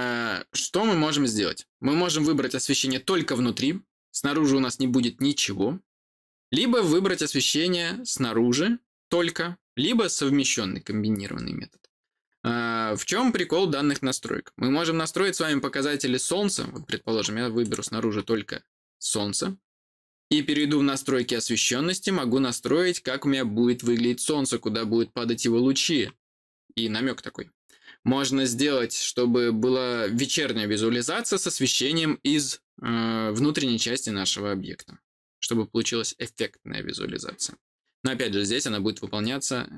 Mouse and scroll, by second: 17.5 click, 20.4 click.